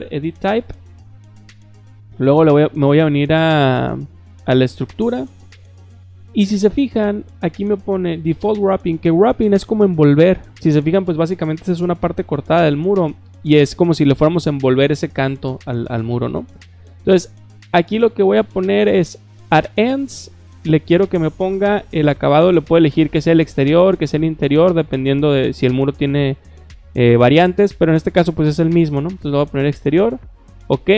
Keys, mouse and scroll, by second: 4.7 click, 19.9 click, 29.0 click, 30.0 click, 30.9 click.